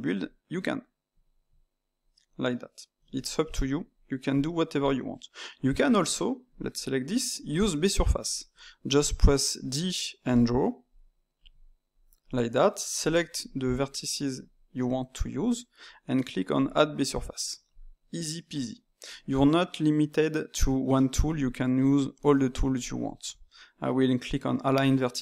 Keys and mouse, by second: 0.1-3.2 drag, 3.2-6.4 ctrl+middle drag, 6.4 click, 7.1-8.8 shift+middle drag, 8.8 d, 9.4 d, 9.5 click, 10.2 d, 10.8 click, 11.4 d, 11.9 click, 12.2 d, 12.9 alt+click, 15.3 click, 16.5-18.7 drag, 18.7-21.8 middle drag, 22.7 alt+click.